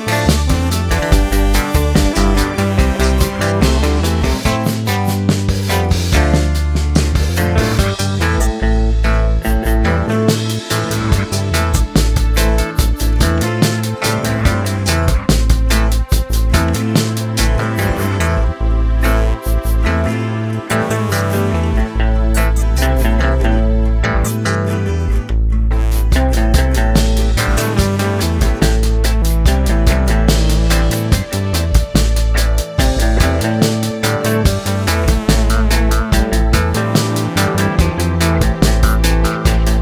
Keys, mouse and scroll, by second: 2.5-3.6 drag, 11.8-12.9 drag, 13.9 click, 16.1 middle click, 16.2-16.7 scroll down 2, 16.7 middle click, 16.8 3, 17.2 a, 17.9 u, 19.4 click, 20.2-24.1 middle drag, 24.1-25.4 drag, 28.7-30.2 drag, 31.3 middle click, 32.1-33.2 drag, 35.1-39.8 middle drag.